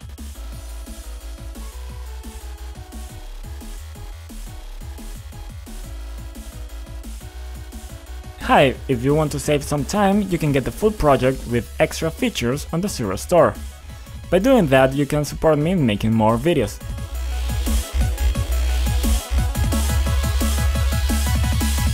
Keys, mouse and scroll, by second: 0.0 Down, 0.1 Return, 0.2 Return, 1.6 click, 2.9 F5, 4.2 click, 4.8-8.1 typing.